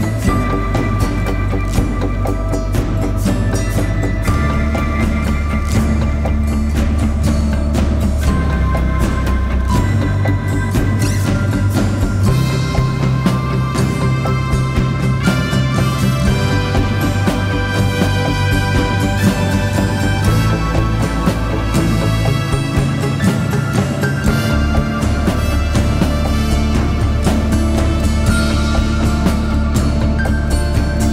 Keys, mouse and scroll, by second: 1.6 z, 1.8 click, 2.1 space, 2.1 click, 2.3 z, 2.5 click, 2.7 space, 7.6 shift+click, 14.6 click, 21.5-23.7 typing, 21.7 click, 22.3 click, 22.7 click, 23.8 click, 27.0-27.9 scroll up 1, 29.1 ctrl+c.